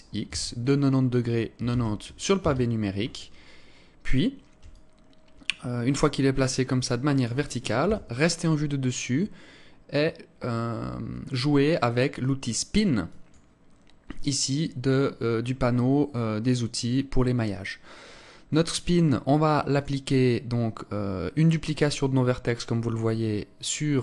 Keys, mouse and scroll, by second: 4.4 alt+click, 7.6 KP_7, 12.7 click, 17.7 scroll up 2, 19.3 click.